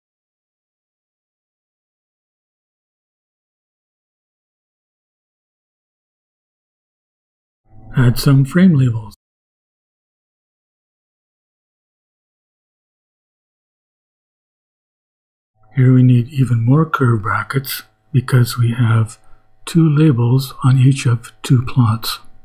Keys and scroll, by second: 0.0-0.2 typing, 1.5 shift+Return, 6.3 ,, 7.6 Return, 8.2 shift+Return, 8.3-12.9 typing, 14.7 shift+[, 15.2 shift+], 16.6 Left, 17.3 shift+Left, 17.8-19.9 typing.